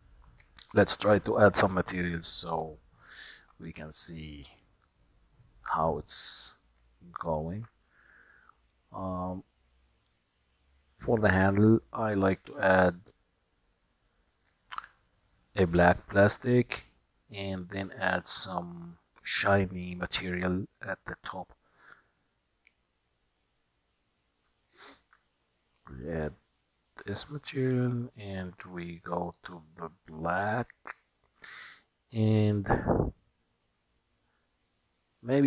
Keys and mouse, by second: 0.6-1.6 shift+middle drag, 2.8-3.5 shift+middle drag, 6.3 middle click, 7.0-7.8 shift+middle drag, 14.2 click, 15.6 click, 17.2-24.1 drag, 25.4 click, 29.0 click, 33.5-34.5 middle drag.